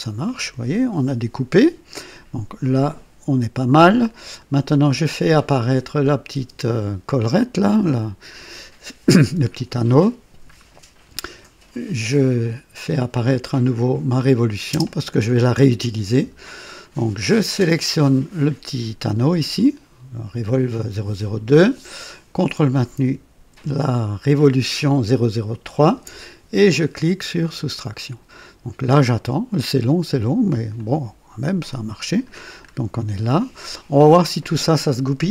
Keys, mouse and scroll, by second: 6.0 click, 6.3 space, 7.8 click, 11.8 click, 14.0 click, 14.7 space, 18.0 click, 25.5 ctrl+click, 27.4 click, 30.7-32.3 drag, 32.6-32.9 scroll up 1, 33.3-34.7 drag.